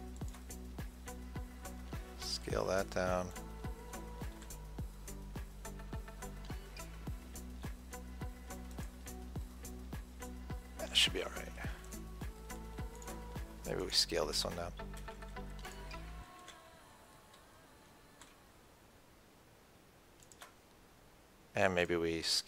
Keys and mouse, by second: 2.6-3.7 middle drag, 3.7-5.5 drag, 4.7 s, 12.3-15.4 drag, 15.4 Tab, 16.8 Tab, 18.5 s, 22.1-22.4 drag.